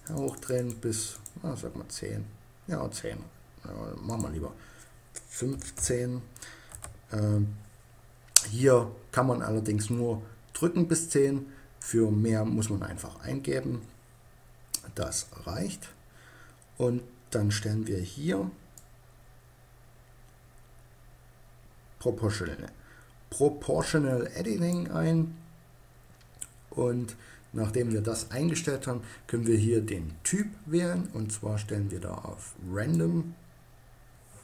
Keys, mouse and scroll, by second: 3.6-5.5 drag, 15.1-18.2 middle drag, 18.2-20.1 drag, 29.9-31.6 drag.